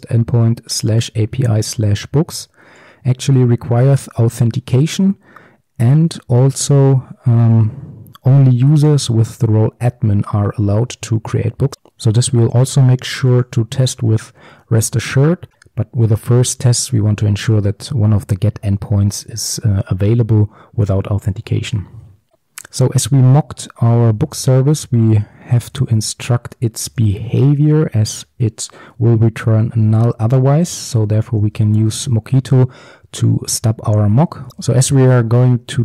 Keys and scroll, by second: 28.2 Return, 34.5 ctrl+z, 35.6 Return.